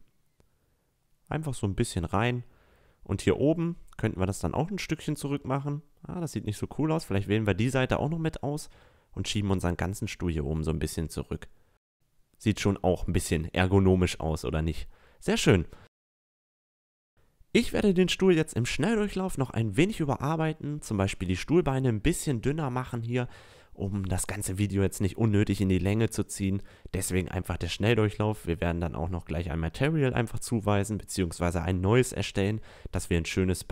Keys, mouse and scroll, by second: 2.0 a, 2.2-5.0 right drag, 5.4-7.0 middle drag, 10.7-12.4 middle drag, 12.8 a, 13.0 Tab, 13.3 middle click, 14.0 middle click, 14.1-15.1 middle drag, 16.8 Tab, 16.8 a, 17.3 Tab, 17.6 drag, 18.4 s, 18.5 click, 19.4 ctrl+r, 19.9-23.0 typing, 20.0 ctrl+r, 20.2 ctrl+r, 20.4 ctrl+r, 22.5 Tab, 22.7 Tab, 22.8 click, 24.0-25.7 typing, 24.1 click, 24.6 Tab, 24.7 Tab, 24.9 click, 25.4 click, 26.0 Tab, 26.6 middle click, 27.5 middle click, 27.8 click, 28.6 click, 29.2 click, 29.5 Tab, 29.6 a, 29.8 click, 31.1 click, 31.4 middle click, 31.5 Tab, 31.6 a, 32.4 middle click, 32.5 click, 32.6 Tab, 33.0 a, 33.0 right click, 33.4 a.